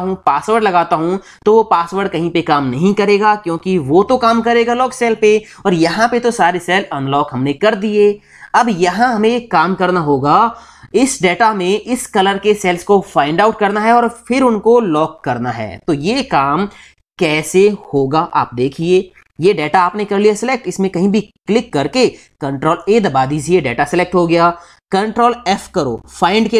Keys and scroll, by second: 22.5 ctrl+a, 26.0 ctrl+f.